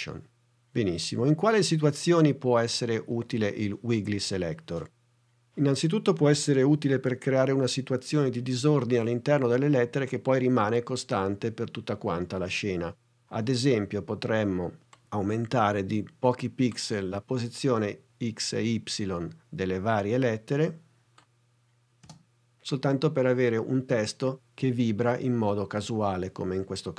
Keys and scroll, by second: 22.0 space.